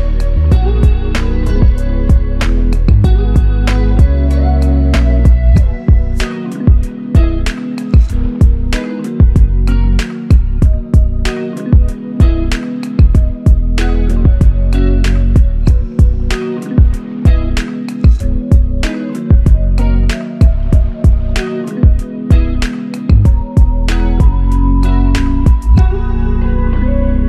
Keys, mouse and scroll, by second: 0.2 ctrl+click, 5.4 shift+click, 9.5 alt+shift+click, 12.4 shift+click, 16.2 shift+click, 16.4 shift+double click, 21.4 typing, 21.5 alt+click, 22.6 alt+click, 24.0 shift+click, 25.7 shift+click.